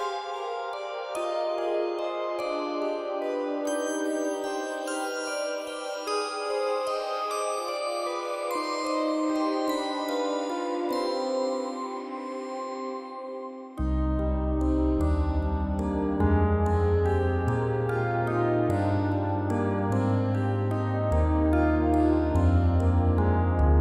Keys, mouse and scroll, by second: 0.2-1.2 scroll down 1, 1.2 KP_Divide, 1.5-2.0 scroll down 1, 2.0 KP_7, 3.0 g, 4.0-4.6 middle drag, 4.6-5.0 scroll up 5, 5.6 g, 6.8-7.2 scroll up 5, 7.4 scroll down 1, 7.7 middle click, 8.4 g, 9.5 scroll down 3, 9.7-10.3 middle drag, 10.3 KP_Divide, 10.8 ctrl+z, 10.9 ctrl+z, 11.0 ctrl+z, 11.5-12.0 scroll down 1, 12.4 scroll down 11, 13.1 ctrl+shift+z, 13.4-14.2 scroll up 11, 14.2-15.7 middle drag, 16.6 shift+z, 16.9 KP_1, 17.9 shift+z, 18.2-18.7 scroll up 1, 18.7 scroll down 1, 18.9-20.4 middle drag, 20.9 r, 23.4 scroll down 1.